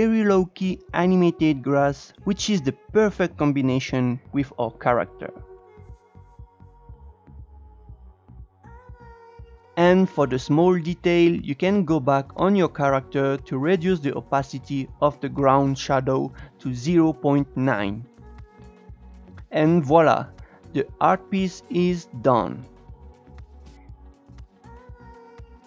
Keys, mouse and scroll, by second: 1.8-5.7 drag, 6.1-6.7 scroll down 1, 6.7-7.7 scroll down 1, 7.7-8.5 scroll down 3, 9.3 click, 9.5 Tab, 12.2 click, 13.4 click, 14.4 click, 15.8-18.5 drag, 18.6-21.9 drag.